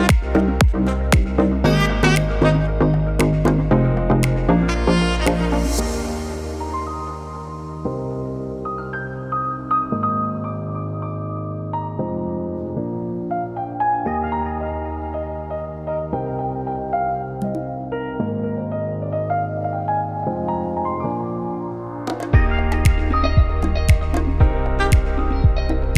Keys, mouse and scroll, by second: 0.9 u, 5.3 Tab, 9.6 ctrl+a, 11.0 Tab, 11.9 u, 15.2 middle click, 18.0 ctrl+i, 19.0 middle click, 24.1-24.9 scroll down 1, 24.9 a, 25.3 middle click.